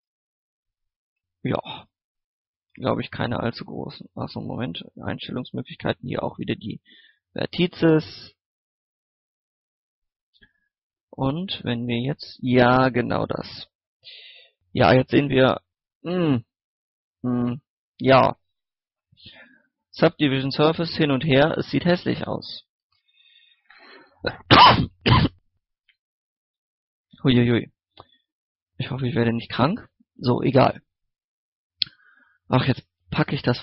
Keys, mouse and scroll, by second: 0.8 scroll down 1, 0.9 middle click, 1.0 scroll up 1, 1.4 middle click, 2.7-3.2 scroll up 1, 4.0 x, 4.2 click, 4.5 shift+a, 5.2 click, 14.0-16.0 middle drag, 16.0 scroll up 1, 17.9 shift+middle click, 18.9 shift+middle click, 19.1 scroll up 1, 20.2 middle click, 21.0 Tab, 21.5 middle click, 22.2 alt+right click, 22.5 scroll down 1, 22.8 scroll up 1, 26.4-26.7 scroll down 1, 27.0 middle click, 27.2-27.5 scroll up 1, 27.5 middle click, 27.8-29.6 scroll up 1, 29.6 middle click, 29.7-30.0 scroll down 1, 30.0 middle click, 30.2 scroll up 1, 30.5 middle click, 31.5-32.0 scroll down 1, 32.3 shift+middle click, 32.6 scroll up 1.